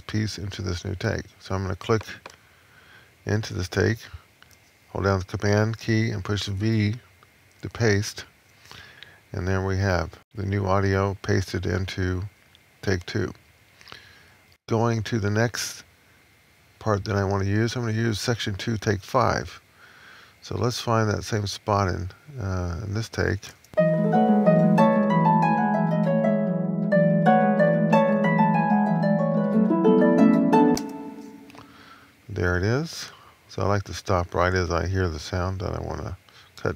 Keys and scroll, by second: 7.4 super+v.